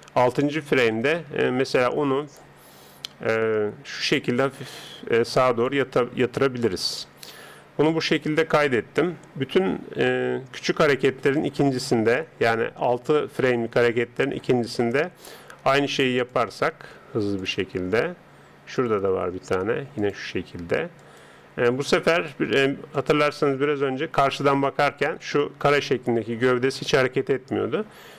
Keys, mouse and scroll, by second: 0.8 KP_1, 3.1 r, 8.0 click, 15.4 r, 17.4-20.5 drag, 19.4 r, 25.5-28.1 middle drag.